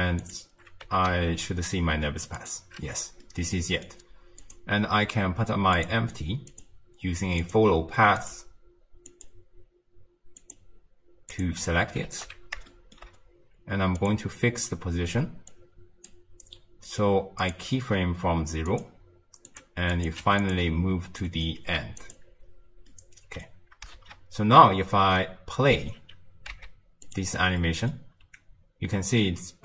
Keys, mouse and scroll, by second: 0.2 click, 0.8 g, 3.2-4.4 middle drag, 4.4 click, 5.8 click, 6.5-8.3 drag, 10.4 click, 12.1 alt+g, 12.7-14.0 shift+middle drag, 14.0 click, 15.5-29.6 drag.